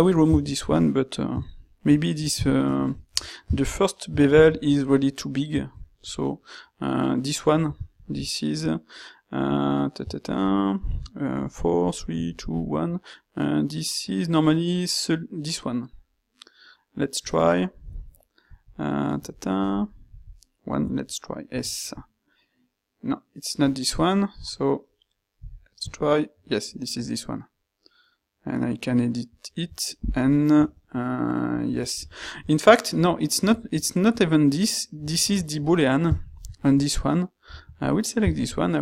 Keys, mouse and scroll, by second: 0.4 ctrl+shift+q, 7.9 ctrl+shift+q, 30.4-30.8 middle drag, 32.6 ctrl+middle click, 36.3 ctrl+shift+q.